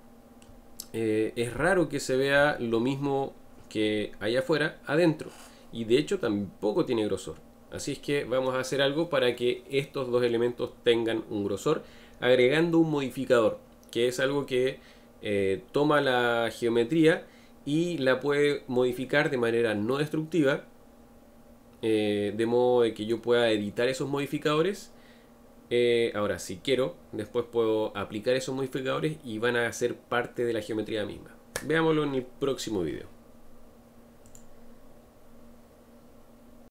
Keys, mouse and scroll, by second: 1.0-1.6 scroll up 1, 1.6-36.7 shift+middle drag.